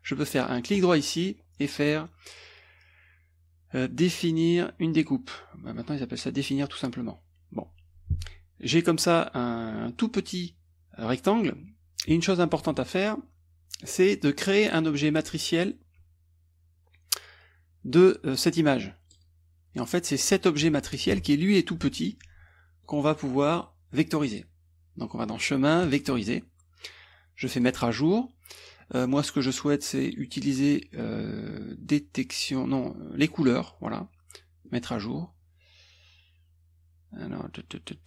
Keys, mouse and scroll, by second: 0.8 right click, 5.8 click, 8.1 click, 8.7 click, 13.8 click, 19.2 click, 19.9-21.5 drag, 22.8 click, 25.8 click, 27.6 click, 30.2 click, 33.2 click, 34.7 click.